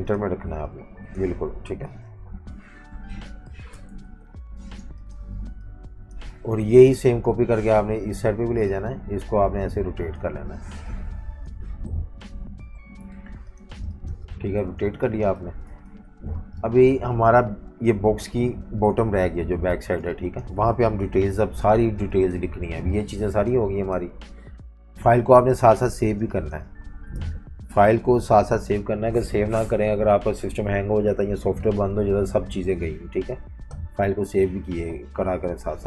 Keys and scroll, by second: 1.8 super+g, 2.0 Up, 2.6 Up, 3.1 Left, 3.4 v, 3.6 v, 3.9 super+-, 4.0 super+-, 4.2 super+-, 4.8-7.0 typing, 12.1 Tab, 12.4 Tab, 12.5 Tab, 13.1-15.3 typing, 15.8 super+-, 16.0 super+-, 19.8 typing, 21.1 alt+super+2, 21.8 typing, 23.7 Delete, 26.2 space, 27.1 F18.